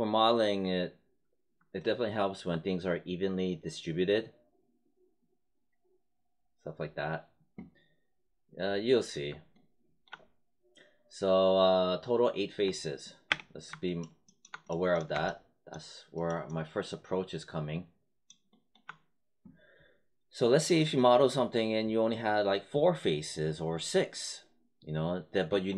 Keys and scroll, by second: 12.6 space.